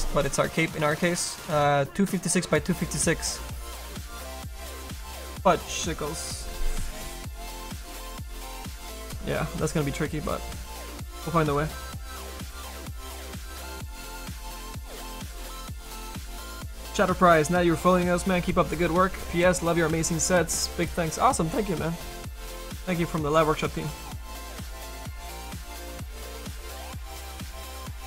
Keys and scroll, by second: 0.2 space.